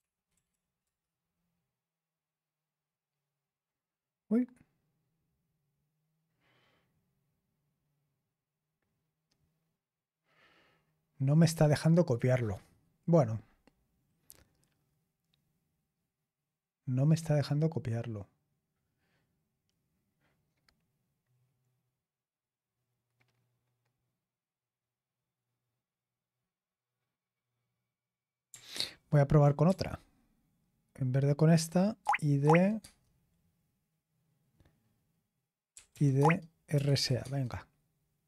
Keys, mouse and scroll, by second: 0.1 BackSpace, 0.3 BackSpace, 0.4 BackSpace, 0.8 Return, 28.7 ctrl+p, 29.6-31.5 BackSpace, 32.0 Tab, 32.4 Tab, 32.7 Tab, 35.4-37.4 typing.